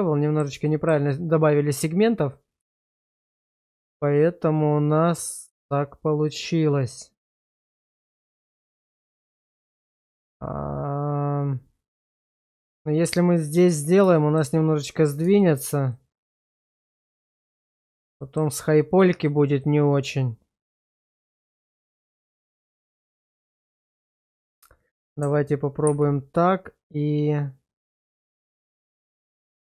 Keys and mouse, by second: 0.7 shift+middle click, 2.3-12.6 middle drag, 14.1 shift+middle click, 15.4 shift+middle click, 15.9 middle click, 17.0 shift+middle click, 17.5 middle click, 18.2 shift+middle click, 19.6-24.6 middle drag, 25.8 ctrl+x.